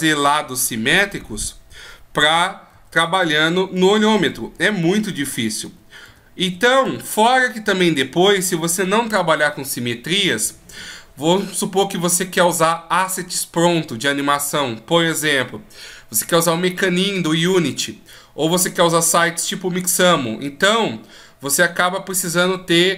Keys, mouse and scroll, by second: 1.1 n, 2.3 ctrl+z, 2.7 ctrl+z, 3.1 ctrl+z, 3.4 ctrl+z, 3.7 ctrl+z, 4.2 ctrl+z, 4.5 ctrl+z, 4.9 ctrl+z, 5.3 ctrl+z, 5.6 ctrl+z, 6.0 ctrl+z, 6.4 ctrl+z, 6.8 ctrl+z.